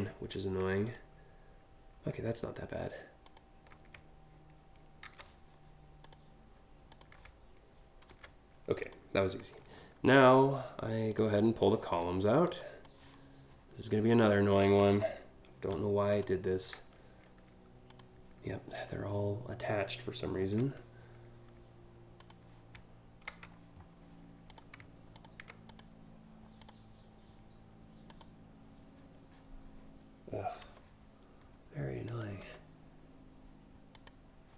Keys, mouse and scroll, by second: 0.5 click, 2.9 shift+click, 4.6 ctrl+c, 5.7 click, 6.5 click, 7.8 ctrl+v, 8.5 click, 9.2 scroll up 1, 10.8 click, 11.6 scroll down 4, 11.8 scroll up 1, 12.0 scroll down 1, 12.5-13.8 drag, 14.6 Delete, 15.7 click, 17.5 click, 20.2 c, 21.8 click, 22.9 ctrl+v, 24.1 click, 24.8 ctrl+click, 25.3 click, 26.2 click, 27.7 click, 30.7 Delete, 31.7 click, 32.0 Delete, 33.6 click, 34.3 click.